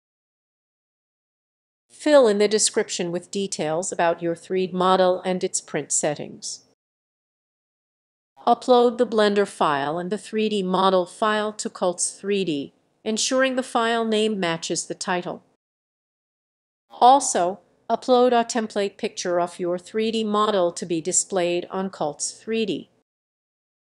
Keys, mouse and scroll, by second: 0.0-0.6 typing, 4.7-7.2 typing.